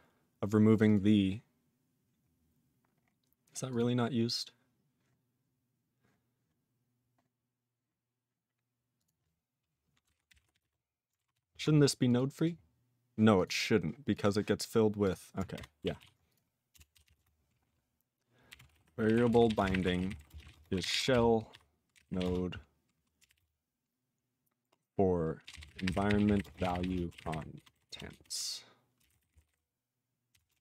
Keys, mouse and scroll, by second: 0.7 click, 0.8 click, 0.8 double click, 0.9 double click, 2.3 scroll down 5, 2.9-3.6 scroll up 10, 3.7 click, 3.7 click, 8.9 click, 9.0 click, 10.0-11.2 typing, 11.4 ctrl+s, 12.0 click, 12.1 click, 12.3 click, 12.4 click, 13.3 click, 13.4 click, 14.1 click, 14.2 click, 15.0 click, 15.0 click, 15.5 ctrl+BackSpace, 16.0 ctrl+s, 16.2 click, 16.3 click, 16.7 Return, 16.9 /, 17.0 /, 17.1 space, 18.2-23.8 typing, 25.2-30.3 typing, 28.6 Delete, 30.5 ctrl+space, 30.5 ctrl+a.